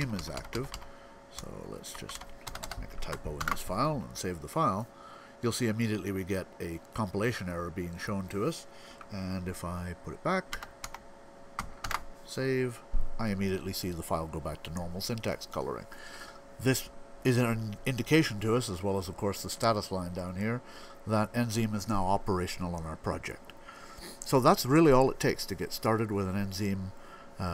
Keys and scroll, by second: 1.3 Right, 1.5 Right, 2.0 Right, 3.2 super+s, 10.3-12.1 typing.